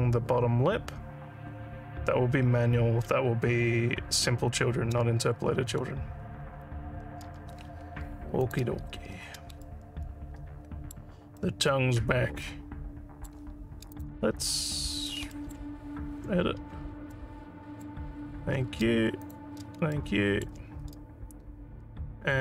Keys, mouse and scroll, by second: 8.4 click, 9.6-10.9 alt+middle drag, 11.4 alt+middle click, 12.4 alt+middle click, 13.9 click, 15.3 alt+middle click, 15.7 Tab, 17.1 alt+middle click, 18.2 alt+scroll up 1, 19.2 click, 19.9 alt+middle click.